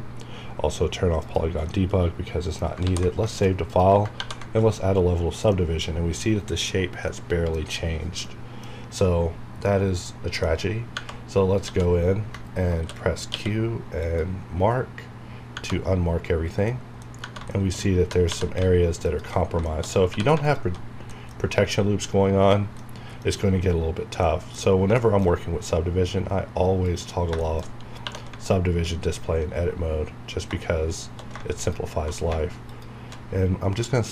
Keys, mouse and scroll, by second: 1.2 click, 1.7-3.2 middle drag, 2.8 ctrl+s, 3.2 shift+middle click, 3.6 click, 5.5-7.6 middle drag, 7.6 scroll up 1, 8.2-10.9 middle drag, 10.9 Tab, 11.6 a, 13.3 q, 14.0 click, 15.5 Tab, 16.7 middle click, 17.2 Tab, 17.5 shift+middle click, 17.8 shift+scroll up 1, 18.0 typing, 19.0 alt+click, 19.6 shift+middle click, 19.8 shift+scroll up 2, 20.1 typing, 20.4 alt+click, 20.9 scroll down 1, 21.4-22.4 scroll up 1, 22.8 middle click, 23.2 scroll down 1, 24.2 scroll down 1, 24.2 middle click, 24.6 scroll up 1, 25.0 shift+middle click, 25.2 shift+scroll up 1, 26.7 click, 27.4 shift+middle click, 27.6 shift+scroll up 2, 28.0 2, 29.8-30.2 scroll down 1, 30.2 scroll up 1, 31.5 alt+shift+click, 32.7 alt+shift+click.